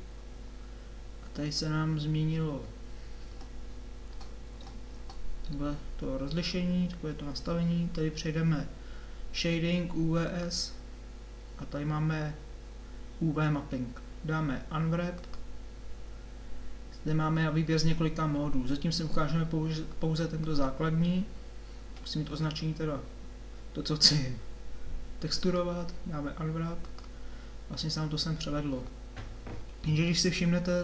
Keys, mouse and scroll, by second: 3.2 Tab, 4.1 Tab, 4.5 Tab, 4.9 Tab, 22.3 a.